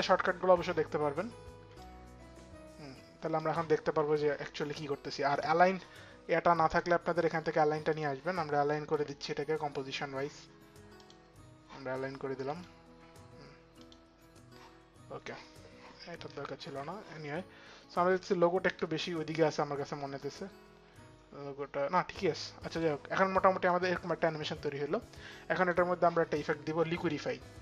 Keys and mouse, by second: 1.4 click, 4.9 click, 6.3 click, 7.5 click, 8.5 click, 13.4 click, 14.8 click, 16.2 ctrl+z, 17.8 ctrl+z, 17.8 click, 20.3 click, 21.2 click, 22.3 click, 23.3 click, 26.5 click, 26.6 click, 27.4 click.